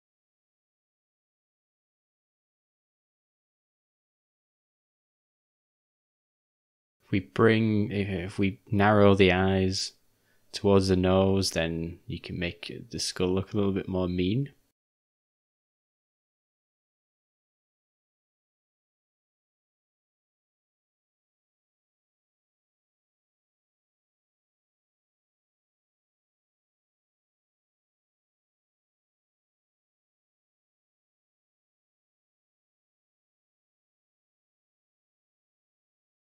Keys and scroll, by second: 8.7-9.2 typing, 14.4 [, 14.6 [, 14.7 [, 22.7 ], 30.1 u, 30.7 [, 30.8 [.